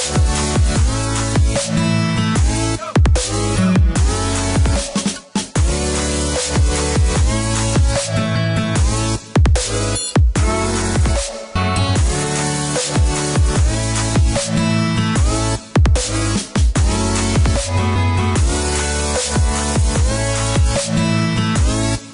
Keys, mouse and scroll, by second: 0.9 middle click, 4.2 click, 6.9 click, 9.2 click, 12.2 space, 13.0 click, 14.0 space, 15.2 click, 16.4 click, 17.6 click.